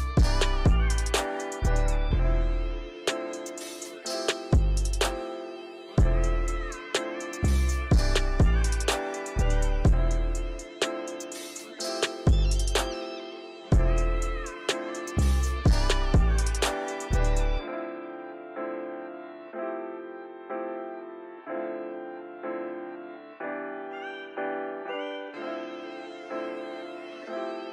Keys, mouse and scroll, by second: 1.9-2.9 drag, 3.6-4.5 drag, 4.6 click, 7.4 click, 7.8 click, 7.9-9.4 drag, 9.9 click, 10.5-10.8 drag, 12.3 click, 13.1 click, 13.2 click, 15.1 click, 15.5 click, 16.6-17.9 drag, 18.9-20.3 drag, 20.3 scroll down 3, 20.9-21.7 shift+middle drag, 21.7-22.1 scroll down 1, 22.1 click, 22.4-23.5 shift+middle drag, 23.5-25.2 drag, 27.1-27.5 scroll down 2, 27.5-27.7 shift+middle drag.